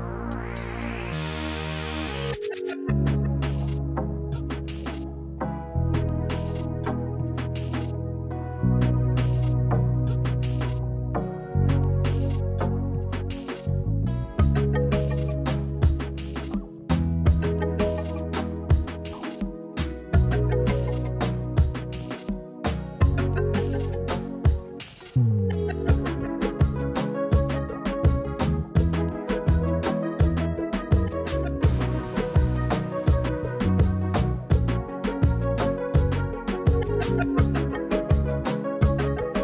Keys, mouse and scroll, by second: 2.3 click, 2.6 Tab, 2.7 click, 3.1 Tab, 3.2 click, 3.4-4.3 middle drag, 4.8-6.4 middle drag, 7.1 KP_1, 8.7 shift+middle drag, 9.4 shift+a, 10.7 click, 11.8 middle drag, 12.3 click, 12.5 click, 12.7 Tab, 13.3 click, 13.8 Delete, 14.5 KP_1, 15.2 a, 15.8 click, 16.6 s, 17.7 click, 18.6 click, 19.5 z, 20.3 click, 20.7 e, 21.0 z, 21.6 click, 22.2 s, 22.7 click, 22.9 e, 23.1 z, 24.4 click, 25.0 middle click, 26.0 KP_1, 26.8 click, 27.4 e, 27.6 z, 28.1 z, 28.8 click, 29.2 s, 31.3 click, 31.5 middle click, 32.4 click, 34.9 click, 35.8 click, 36.1 KP_1, 36.7 g, 37.0 z, 38.0 click, 38.3-38.6 middle drag, 39.0 click.